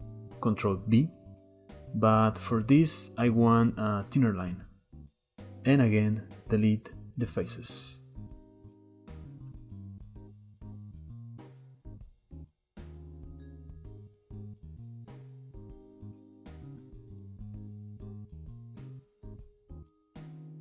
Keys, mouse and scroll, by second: 0.2 ctrl+b, 5.6 x, 7.1 Tab, 8.0-8.7 scroll down 2, 8.7 Tab, 8.9-10.2 shift+middle drag, 10.2 k, 14.6 k, 15.0-16.3 shift+middle drag, 19.1 shift+middle click, 19.6 scroll up 1, 19.8-20.3 shift+middle drag, 20.3 ctrl+b.